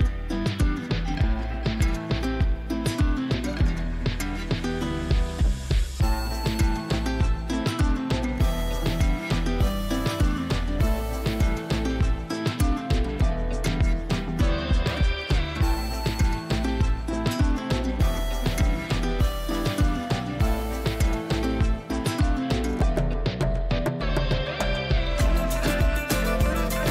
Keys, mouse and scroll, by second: 0.0-0.6 click, 2.6 Return, 3.2 click, 6.8 shift+F6, 8.3 ctrl+l, 9.7-12.5 drag, 14.2 Return, 15.1 click, 15.5 v, 16.4 ctrl+l, 18.0-21.7 drag, 25.4-26.9 scroll down 1.